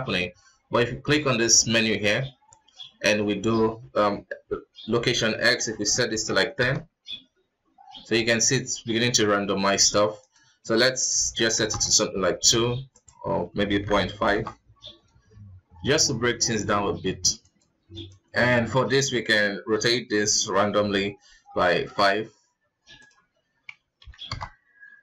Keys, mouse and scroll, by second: 1.2-6.4 drag, 10.4-16.1 drag, 17.6 click, 18.7-21.8 drag, 23.1-25.0 drag.